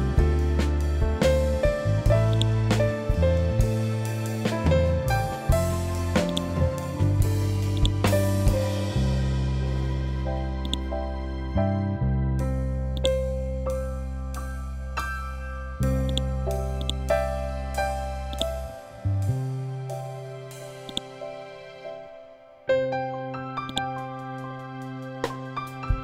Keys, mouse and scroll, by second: 2.2-5.5 drag, 6.2 click, 10.5 click, 12.9-14.7 drag, 14.7 F12, 16.0 click, 18.7 scroll down 1, 20.8-22.3 drag, 22.3 ctrl+g, 23.6 click, 25.0 5, 25.2 Tab, 25.7 3.